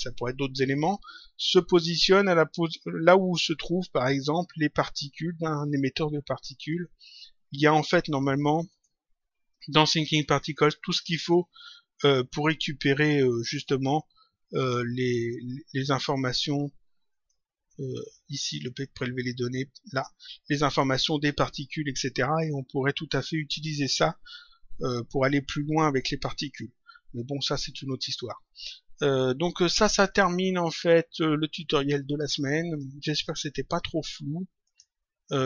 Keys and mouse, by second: 8.6 click, 10.5 click, 13.2 click, 14.4 click, 15.9 click, 17.0 click, 18.3 click, 19.8 click, 23.0 click, 30.0 click, 31.5 click, 32.6 click, 34.6 click.